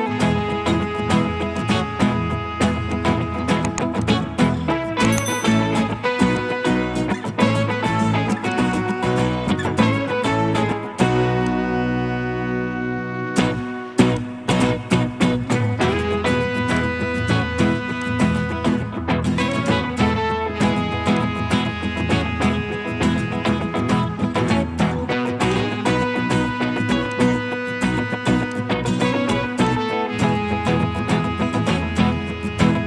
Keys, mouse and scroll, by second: 12.9-15.0 scroll down 1, 22.1-22.8 scroll down 1, 22.8 scroll up 1, 22.9 scroll down 1, 24.2-25.5 scroll up 1.